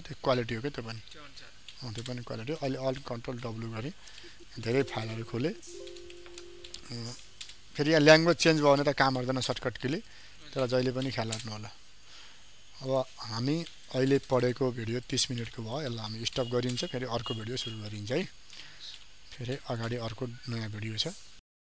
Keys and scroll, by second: 3.2 ctrl+alt+w.